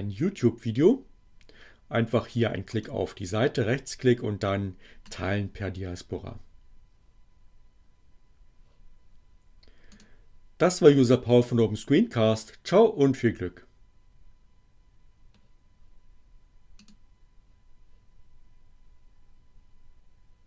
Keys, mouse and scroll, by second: 2.7 right click, 5.1 click, 9.9 click, 16.7 click.